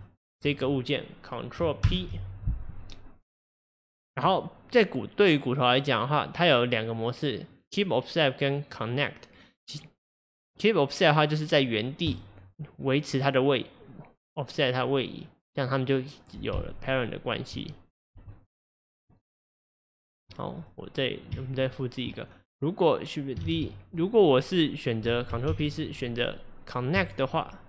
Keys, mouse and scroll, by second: 0.0 shift+click, 1.8 ctrl+p, 16.6 Tab, 18.2 g, 20.6 click, 21.4 Tab, 23.5 shift+d, 25.5 ctrl+p.